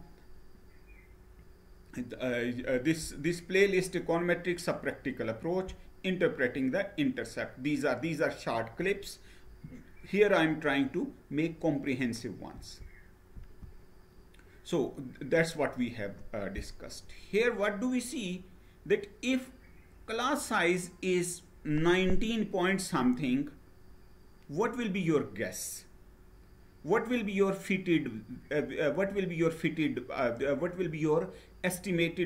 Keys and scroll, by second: 12.2 Right, 13.1 Right.